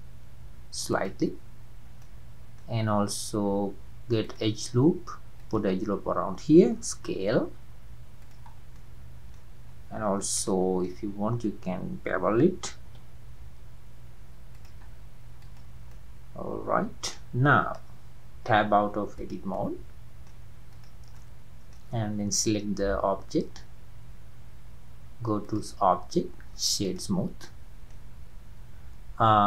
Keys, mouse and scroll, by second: 2.0-4.2 middle drag, 4.2-7.1 drag, 7.1 s, 8.6 scroll down 3, 8.8 middle click, 9.7-10.5 scroll up 2, 10.5 shift+middle click, 11.0-11.9 scroll up 4, 12.6 scroll up 1, 12.9 ctrl+b, 14.9-15.2 scroll down 3, 15.4 click, 16.0-17.4 middle drag, 17.4-17.9 scroll down 2, 17.9-18.5 scroll down 1, 18.5 Tab, 18.7-19.2 scroll down 2, 19.2 drag, 19.6-20.7 middle drag, 20.7 click, 21.2-24.4 middle drag, 25.4-27.5 drag, 27.5-28.1 middle drag, 28.1-29.4 scroll up 1.